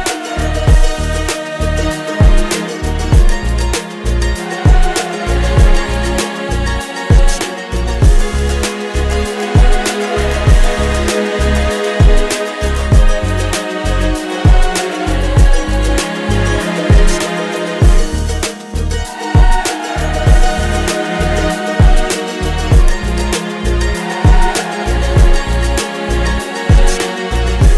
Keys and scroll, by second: 0.0-1.3 typing, 2.7-8.3 typing, 9.7 w, 10.0 n, 12.7 Return.